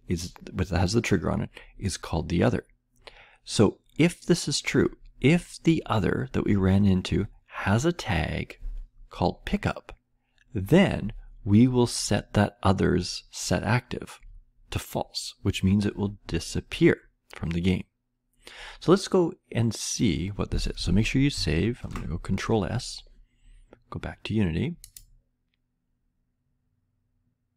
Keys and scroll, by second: 21.8 ctrl+s.